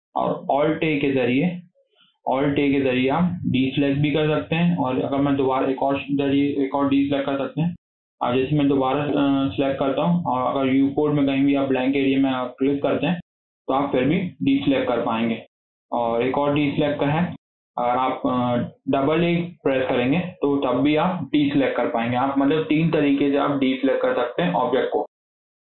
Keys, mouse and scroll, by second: 2.7 alt+a, 9.0 a, 12.5 click, 16.3 a, 19.6 a, 19.7 a.